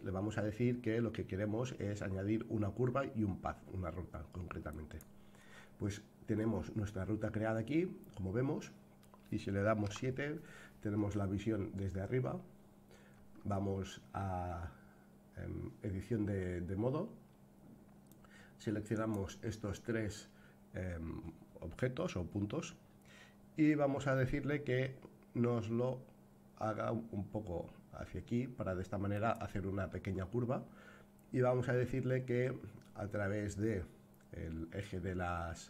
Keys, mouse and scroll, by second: 6.4-9.0 middle drag, 9.9 KP_7, 11.4-12.1 scroll down 3, 13.1 Tab, 18.1-19.1 drag, 24.1 g, 32.8-35.6 middle drag.